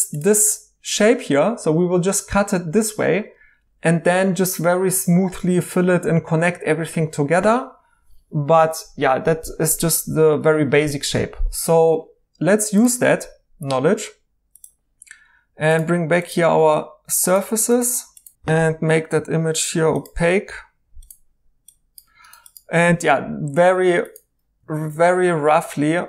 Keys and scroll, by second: 18.4 m.